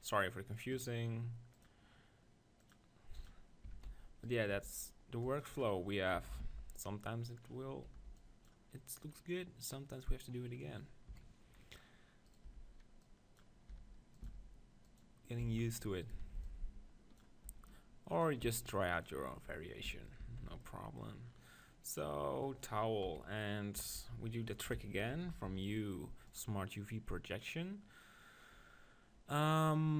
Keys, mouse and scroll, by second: 3.3 click, 3.8 Tab, 3.9 z, 4.2-6.2 drag, 4.5 b, 6.4 ctrl+l, 9.9-11.1 drag, 11.1 KP_1, 11.2 click, 11.6-14.1 middle drag, 12.3-14.1 drag, 12.4 b, 13.7 e, 14.2 s, 15.0-16.8 drag, 15.4 f, 16.0-17.8 right drag, 16.2 b, 17.6 e, 18.2-20.8 drag, 18.4 s, 19.9 f, 20.2 Tab, 20.4 z, 20.8 middle click, 23.0 KP_1, 23.9 KP_7, 24.0 Tab, 25.1 ctrl+l, 25.4 u.